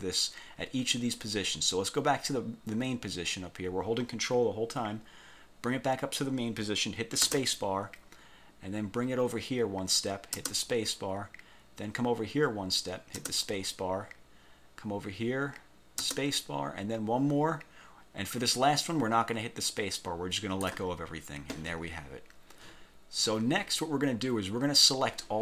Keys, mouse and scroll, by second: 7.4 ctrl+space, 10.5 ctrl+space, 13.3 ctrl+space, 16.2 ctrl+space.